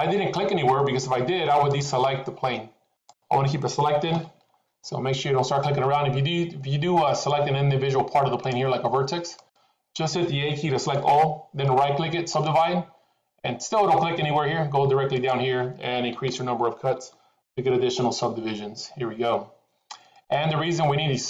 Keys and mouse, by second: 1.6 click, 3.0 click, 4.0 a, 7.1 click, 8.3 click, 9.3 click, 10.8 a, 11.6 right click, 15.2-18.4 drag, 20.2-21.2 middle drag.